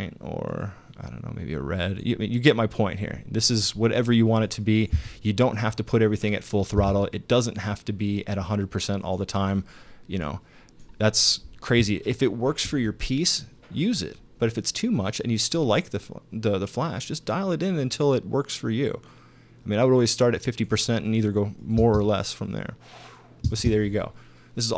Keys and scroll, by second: 4.9 space, 6.8 space, 21.8 space, 23.5 space.